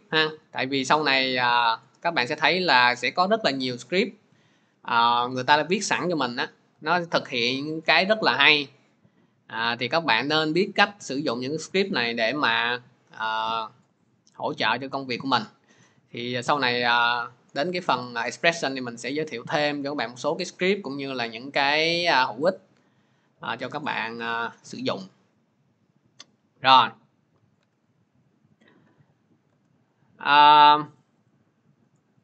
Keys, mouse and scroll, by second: 22.0 click, 24.8-25.4 scroll, 27.4 alt+Tab, 28.0 middle click, 29.3 alt+Tab, 30.3 click, 31.1 click, 32.1 click.